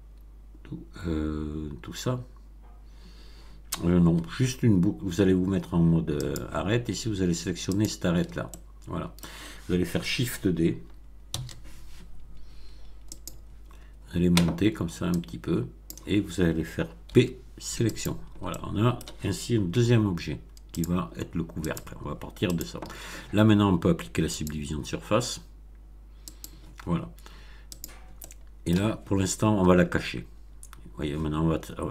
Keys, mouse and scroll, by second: 6.1 click, 7.7 alt+click, 8.5 alt+middle click, 11.3 shift+d, 13.1 click, 15.1 click, 17.0 p, 17.9 click, 18.4 middle click, 19.7 Tab, 20.7 click, 21.6 click, 22.5 click, 24.4 click, 26.3 click, 27.7 click, 28.1-28.9 middle drag, 31.7 scroll down 1.